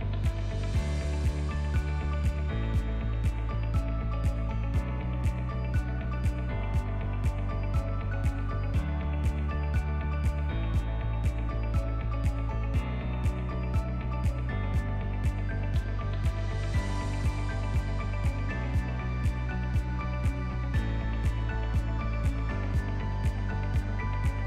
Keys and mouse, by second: 0.1 ctrl+a, 1.2 Tab, 1.9 ctrl+b, 8.9 a, 9.3 m, 10.9 ctrl+click, 11.4 middle click, 11.8 ctrl+middle click, 12.3 middle click, 12.8 alt+z, 13.1 shift+middle click, 13.7 3, 13.9 click, 14.8 i, 16.8 i, 19.3-21.3 typing, 22.1 ctrl+z, 23.9 click.